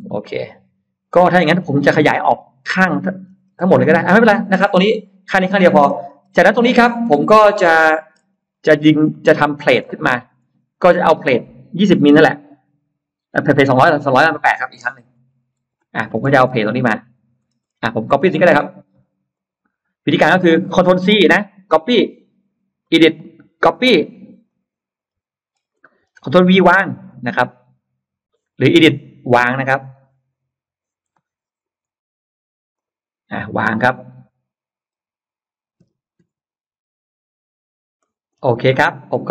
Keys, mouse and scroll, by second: 0.9 scroll down 2, 1.3 scroll up 1, 1.8 middle click, 2.1-2.5 scroll down 2, 2.6 middle click, 3.3-4.1 scroll up 3, 4.1-4.6 scroll down 2, 4.8 middle click, 5.7-6.7 scroll up 3, 6.5-7.9 middle drag, 8.2-8.9 scroll up 4, 8.9 middle click, 9.9 scroll up 2, 10.2-10.5 scroll down 2, 13.4 click, 15.1-15.5 scroll down 2, 16.1-16.5 scroll down 2, 16.1 space, 16.4 Escape, 16.7 middle click, 17.5 middle click, 18.7 click, 18.9 click, 19.2 click, 23.6 click, 24.3 click, 24.9 middle click, 25.3-25.7 scroll up 2, 25.7 middle click, 26.8 ctrl+v, 26.9-27.3 scroll up 2, 28.7 click, 31.5 Escape, 32.6 click, 35.7 F9, 37.9 middle click, 38.3-38.7 scroll down 1, 38.7 scroll up 1, 39.0 click.